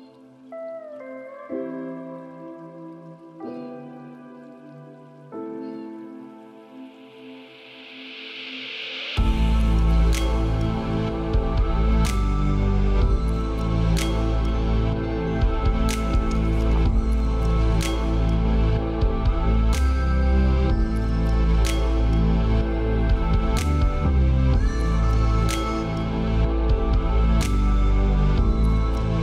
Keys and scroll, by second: 3.3 ctrl+space, 11.2 ctrl+space, 15.3 ctrl+;.